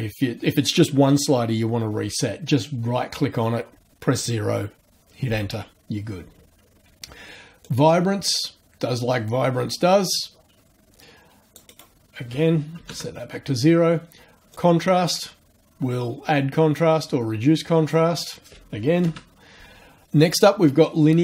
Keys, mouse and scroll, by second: 7.6-12.0 drag, 11.7 right click, 12.8 KP_0, 12.9 KP_Enter, 14.5-18.1 drag, 18.9 KP_0, 19.0 KP_Enter.